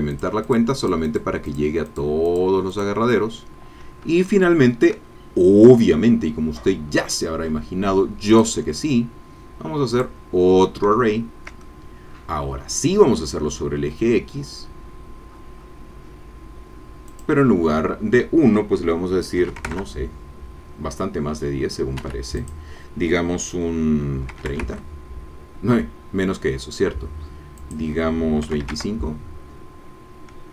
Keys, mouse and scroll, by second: 0.1 click, 0.8-2.6 drag, 2.7 click, 6.1-6.5 scroll down 2, 6.6-7.7 scroll up 3, 8.3 click, 9.9 click, 11.6-13.2 shift+middle drag, 15.3-17.1 scroll down 2, 17.1 click, 19.4 KP_1, 19.6 KP_0, 19.7 KP_Enter, 22.0 Escape, 22.4 click, 24.3 KP_3, 24.5 KP_0, 24.6 KP_Enter, 27.6 click, 28.4 KP_2, 28.6 KP_5, 28.7 KP_Enter, 30.3-30.5 scroll down 2.